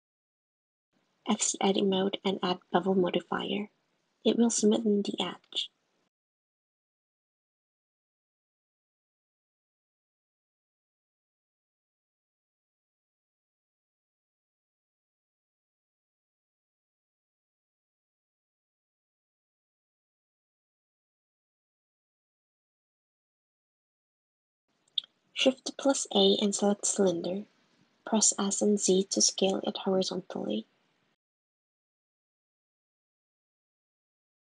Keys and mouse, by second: 0.1 Tab, 0.8 click, 1.0 click, 2.1-3.3 drag, 5.6-7.2 drag, 8.2-9.7 drag, 15.5 click, 16.7 Tab, 19.2 click, 21.2 click, 21.5 `, 24.0 shift+a, 26.0 s, 28.7 g, 29.6 g, 31.0 s, 32.4 g, 33.6 g.